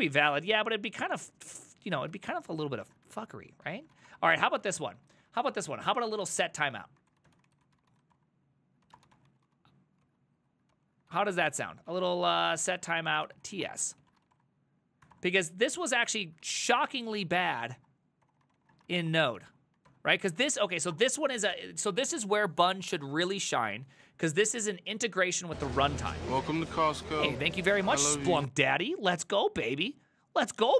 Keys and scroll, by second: 2.2 alt+{, 2.9 ctrl+a, 3.1-21.6 typing, 3.7 ctrl+c, 10.1 ctrl+c, 10.8 ctrl+c, 15.2 Return, 26.9 alt++.